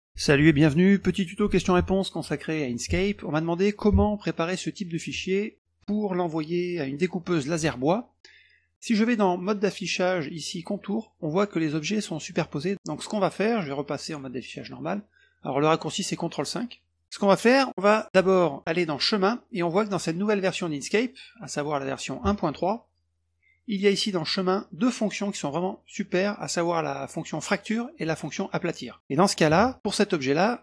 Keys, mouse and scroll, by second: 9.0 click, 10.7 click, 13.5 click, 16.6 click, 17.0 click, 17.0 middle click, 18.9 click, 22.0 click, 23.4 click, 24.3 click.